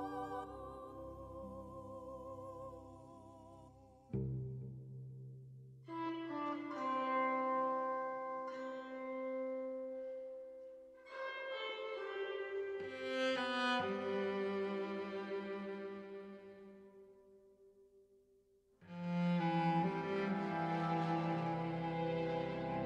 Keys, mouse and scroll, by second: 0.2 shift+middle click, 1.0 r, 2.8 r, 4.1 middle click, 5.2 ctrl+s, 5.5 shift+middle click, 5.7 middle click, 6.0 right click.